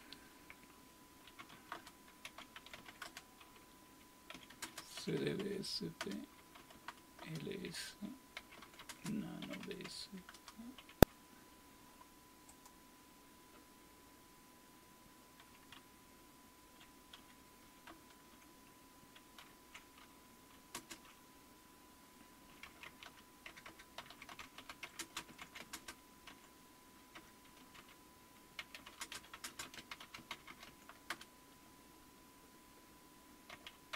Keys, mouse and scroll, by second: 1.1-10.3 typing, 12.5-15.2 drag, 12.5 typing, 15.0-15.7 typing, 15.3 click, 15.8-16.7 Down, 17.9-28.8 Return, 19.4 #, 20.7 space, 22.4-31.6 typing, 33.3-33.9 typing.